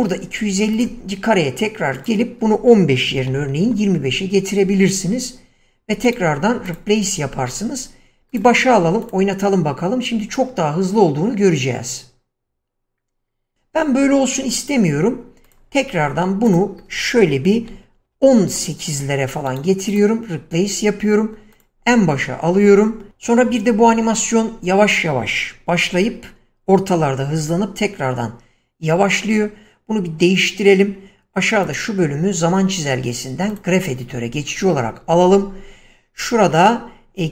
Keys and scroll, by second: 3.4 typing, 4.0 Return, 17.9 1, 18.4 8, 18.8 Return.